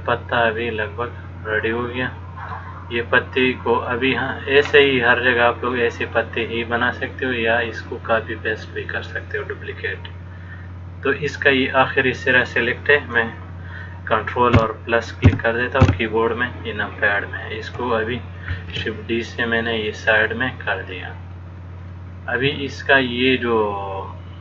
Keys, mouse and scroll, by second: 4.1 middle click, 15.5 ctrl+KP_Add, 16.1 ctrl+KP_Add, 18.7 shift+d, 20.4 middle click, 22.1 click.